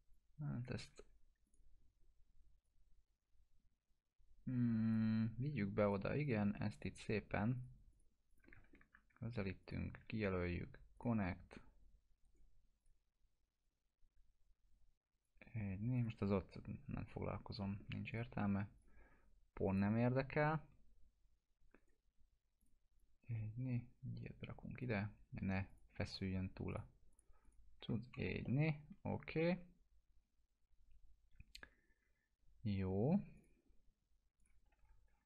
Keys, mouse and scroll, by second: 0.1-0.7 click, 0.9 ctrl+z, 1.4-5.1 drag, 6.2 shift+click, 8.7 ctrl+scroll up 1, 9.6 shift+click, 10.9 click, 12.2 right click, 12.8-15.5 drag, 16.7 scroll down 1, 17.6 alt+middle click, 18.1 click, 18.7 shift+click, 19.7 click, 21.8 right click, 22.6-24.8 drag, 27.8 F4, 28.1 scroll down 1, 28.4-33.1 alt+middle drag, 33.4 click, 34.8 F4.